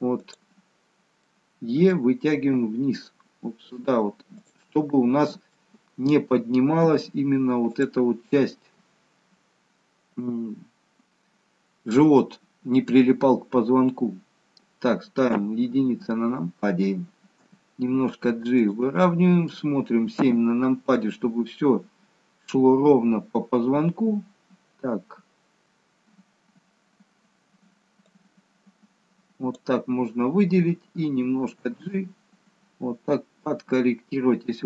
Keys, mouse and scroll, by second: 0.1 click, 1.2 middle click, 2.3 e, 4.6 middle click, 6.8 g, 15.4 KP_1, 17.4 g, 19.1 middle click, 20.2 KP_7, 21.5-22.1 scroll down 2, 22.1-22.5 scroll down 1, 23.2-24.2 scroll down 1, 26.8-28.1 scroll down 1, 28.1 click, 31.6 g.